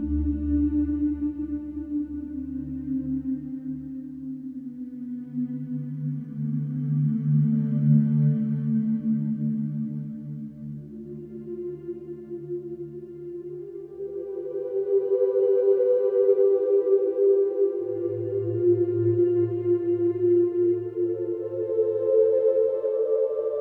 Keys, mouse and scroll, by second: 1.8-2.9 middle drag, 2.9 alt+shift+click, 3.6 ctrl+z, 3.9 middle click, 4.2 scroll up 2, 4.5-5.8 shift+middle drag, 5.8 alt+shift+click, 6.9 alt+shift+click, 7.5-8.7 middle drag, 8.7 alt+shift+click, 9.6 scroll down 2, 9.8 click, 10.6 click, 11.4-13.3 drag, 13.3-13.6 scroll down 1, 13.6 click, 15.0 click, 16.2 scroll down 2, 16.5 Tab, 16.8-17.2 middle drag, 17.2 scroll down 1, 17.5-17.8 middle drag, 17.8 scroll down 2, 18.0 shift+middle click, 18.4 scroll down 1, 18.6-19.0 middle drag, 19.0 click, 19.5 Tab, 19.8-20.2 scroll up 1, 20.2 middle click, 20.7-21.1 scroll up 1, 21.1-22.6 middle drag, 22.6 ctrl+r.